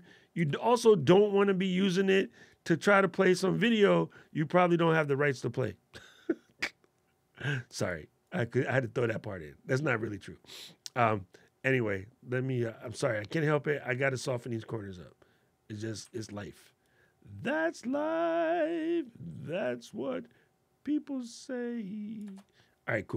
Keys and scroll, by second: 22.1 alt+super+8.